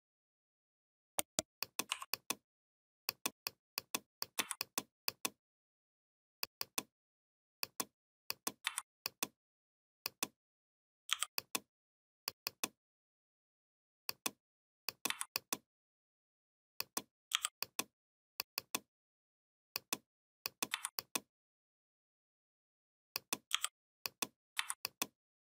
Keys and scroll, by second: 4.1 v, 8.4 v, 10.8 i, 14.8 v, 17.1 i, 20.5 v, 23.3 i, 24.3 v.